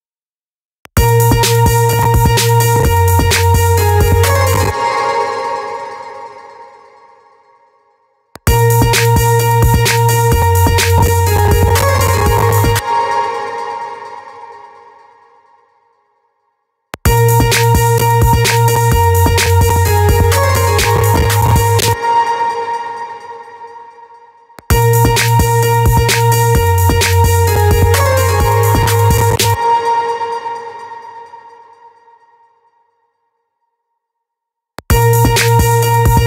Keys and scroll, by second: 0.2 space, 4.1 space, 8.0 space, 12.5 space, 16.3 space, 21.3 space, 24.9 space, 28.9 space, 34.2 space.